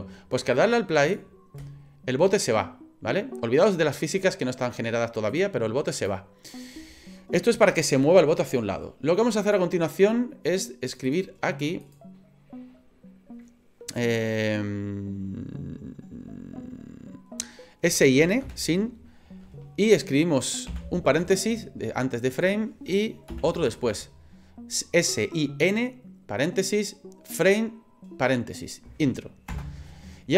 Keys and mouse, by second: 1.0 click, 1.6 space, 5.3 click, 6.0 click, 9.5-30.1 drag.